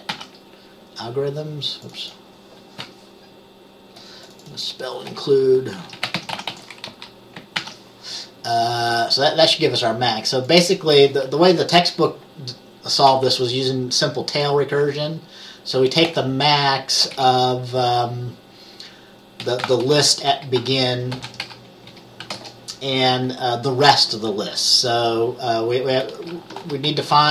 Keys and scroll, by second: 0.2 ctrl+s, 5.8-7.1 typing, 7.7 ctrl+s, 13.2 typing, 14.9 typing, 16.2 typing, 17.2 typing, 19.3-22.8 typing, 26.2-27.3 typing.